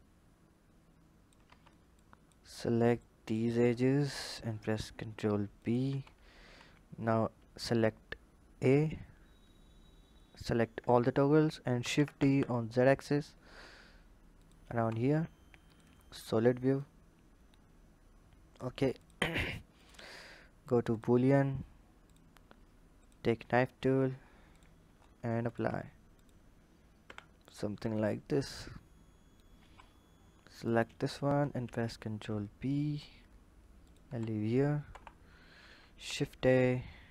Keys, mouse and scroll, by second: 1.8 click, 2.8 click, 15.5 click, 15.8-16.5 scroll down 1, 16.5 scroll down 1, 16.6 click, 18.8 click, 19.5-22.9 drag, 25.2-26.0 drag, 26.7 h, 27.2 click, 28.3 click, 29.4 Tab, 30.3 click, 31.2 ctrl+b, 33.8 Tab, 34.6 KP_1, 35.1-35.8 scroll down 3, 35.8 shift+a.